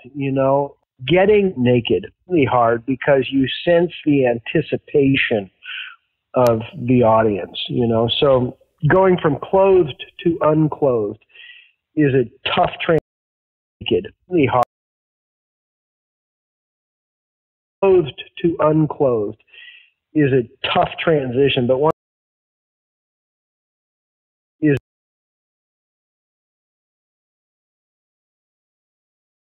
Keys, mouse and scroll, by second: 5.1-7.2 drag, 7.6 click, 8.7 click, 9.4-10.8 drag, 11.2-12.8 drag, 12.9 space, 13.5 click, 13.7 space, 14.5 space, 14.8 click, 16.2 F8, 17.6 click, 17.7 space, 18.6-20.4 drag, 20.9 click, 21.8 space, 22.6-24.5 drag, 24.5 space, 26.3 ctrl+x, 26.6 ctrl+v, 27.1 click, 27.7-29.1 drag.